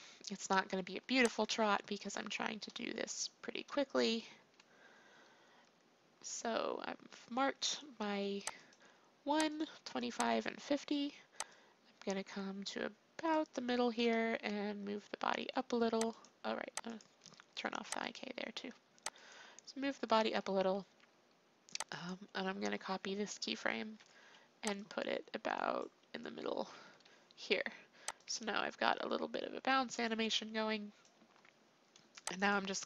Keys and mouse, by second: 4.4 i, 8.5-14.2 drag, 14.2 g, 16.8-17.9 drag, 19.8-23.8 drag, 23.8 ctrl+c, 24.7-26.7 drag, 26.7 ctrl+v, 28.1-30.0 drag, 32.4-32.8 drag.